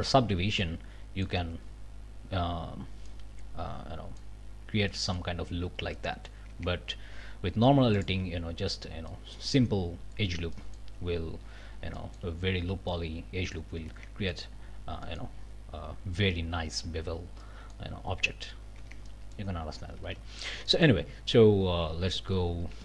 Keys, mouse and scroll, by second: 0.6 click, 1.4 Tab, 1.7 scroll down 1, 2.7 scroll up 1, 3.1-4.4 drag, 4.9 click, 5.9 click, 6.5 Tab, 6.9 scroll up 2, 7.9 alt+click, 8.4 alt+scroll down 2, 9.1 click, 10.5 click, 11.0-11.6 scroll up 4, 12.0 shift+middle click, 12.9 middle click, 13.9 Tab, 14.3 middle click, 14.6-15.0 scroll down 1, 15.0 middle click, 15.1 scroll up 1, 17.4 middle click, 18.0-18.5 scroll up 2, 18.8 Tab, 19.1 middle click, 20.0 alt+a, 20.3-21.0 alt+scroll up 3, 20.7 middle click, 21.0 scroll down 2, 22.5 ctrl+alt+Up.